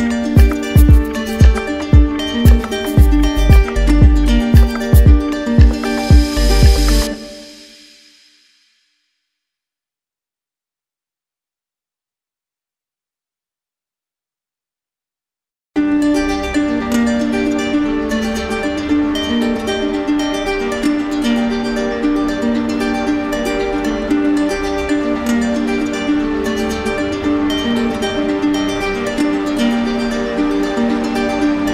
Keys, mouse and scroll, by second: 1.2-2.4 drag, 7.4-8.5 drag, 8.9 z, 9.8-10.9 drag, 11.5 click, 12.7 click, 14.7 click, 14.9 click, 17.2 right click, 19.5 click, 20.5 click, 21.9 click, 28.0 click, 29.6 click, 30.2 click, 31.3 click.